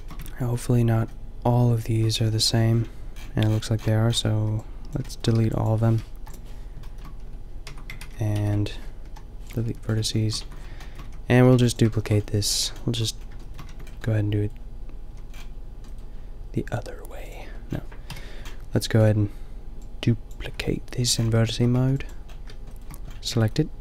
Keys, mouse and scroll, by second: 0.2 Tab, 2.5 middle click, 3.6 middle click, 4.4 b, 4.7 middle click, 6.1 Delete, 7.2 Tab, 7.7 Tab, 8.0 ctrl+z, 8.3 ctrl+z, 9.1 Delete, 9.7 Tab, 10.4 Tab, 11.0 a, 11.3 a, 11.5 b, 13.7 Tab, 15.2 a, 16.0 middle click, 17.3 a, 18.1 KP_5, 20.6 Tab, 21.0 a, 21.8 b.